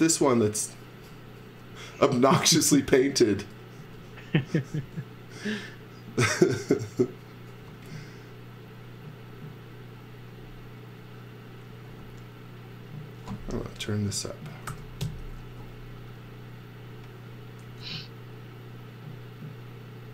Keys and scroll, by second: 3.8 z, 4.8 space, 14.3-15.2 typing, 17.7 f.